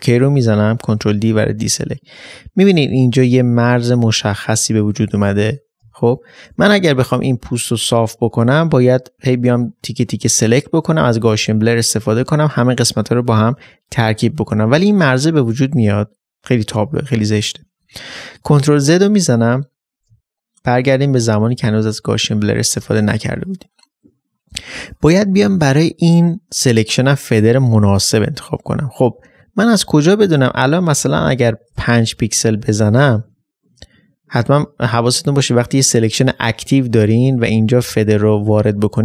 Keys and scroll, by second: 1.0 ctrl+d, 1.5 space, 21.4 ctrl+z.